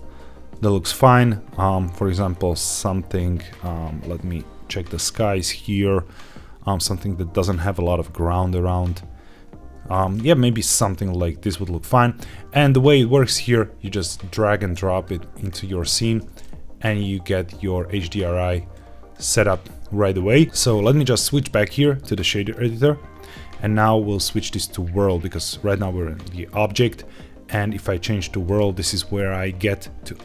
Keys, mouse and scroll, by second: 2.2 scroll down 1, 3.4 click, 4.2 click, 5.0 scroll up 2, 12.5 middle click, 12.9-13.4 scroll down 3, 13.8 click, 16.4-18.6 middle drag, 21.3-22.5 drag, 24.2-28.6 drag, 30.1-30.2 drag.